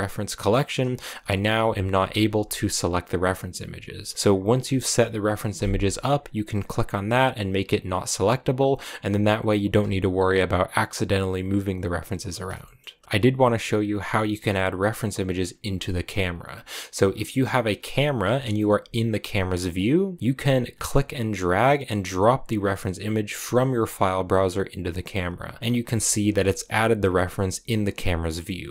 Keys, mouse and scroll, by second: 1.0 a, 1.4 g, 2.3 click, 2.6 right click, 6.3-7.7 drag, 12.5 shift+middle click, 13.0 g, 16.2-16.6 scroll down 3, 16.6 middle click, 16.8 scroll up 1, 17.0 scroll down 3, 17.1-18.2 middle drag, 18.2 KP_0, 20.0-20.3 scroll up 2, 25.6 scroll up 1, 25.6 scroll down 1, 26.9 right click, 27.1 g, 28.1 scroll down 4, 28.3 middle click.